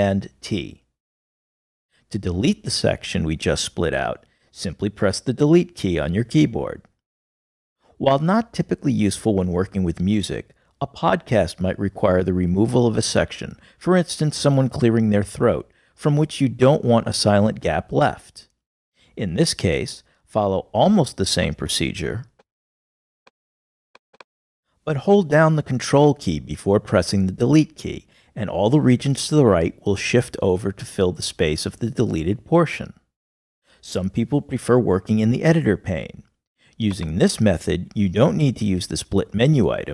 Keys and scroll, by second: 0.7 super+t, 6.7 BackSpace, 22.6 super+t, 24.3 super+t, 26.9 ctrl+BackSpace.